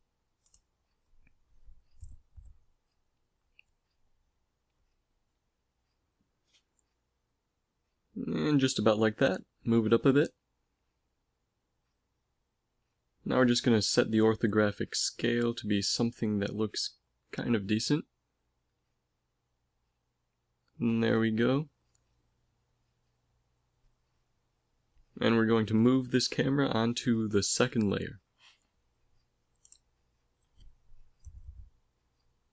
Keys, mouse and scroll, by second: 1.6 KP_5, 3.3 g, 4.5 click, 5.2 g, 6.7 z, 7.5 KP_0, 9.0 z, 9.5 z, 16.7 g, 20.0 a, 20.3 shift+z, 21.8 z, 22.0 z, 26.5 m, 31.4 ctrl+s.